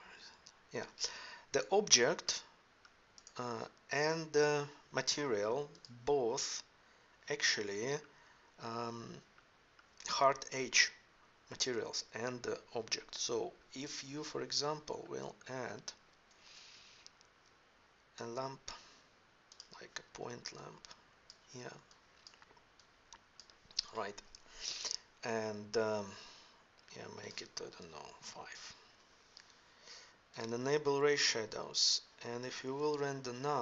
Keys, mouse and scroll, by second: 0.0 Escape, 2.3 middle click, 2.7-3.2 drag, 3.6-3.9 middle drag, 7.8-9.2 middle drag, 9.4 middle click, 14.9 middle drag, 15.1-15.6 middle drag, 15.7-16.3 middle drag, 16.3 shift+a, 20.5-21.8 middle drag, 22.1 middle click, 32.1-33.6 middle drag.